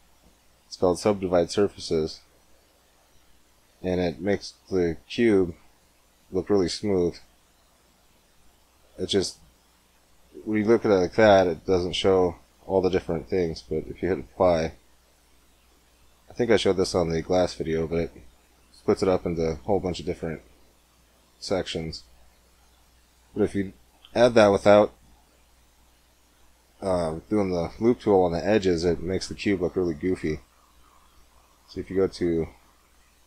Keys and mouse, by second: 2.7-4.4 drag, 4.4 middle click, 5.5-8.2 drag, 8.2-9.2 middle drag, 9.7 Tab, 12.9 Tab, 13.9-15.8 drag, 15.0 Tab, 18.1-19.5 middle drag, 20.6-21.7 middle drag, 22.1 Tab, 22.6 x, 24.5 shift+a, 30.8-33.2 drag.